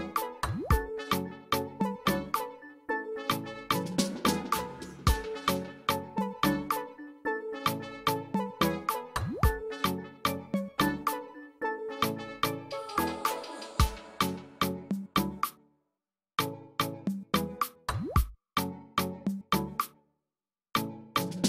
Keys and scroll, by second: 5.7 space, 6.3 ctrl+space, 13.5 space, 20.9 space.